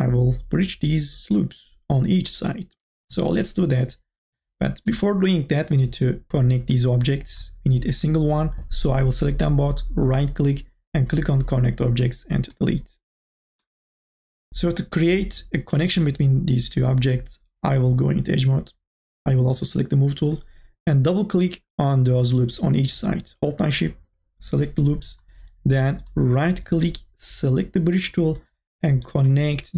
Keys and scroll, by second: 2.8 Delete.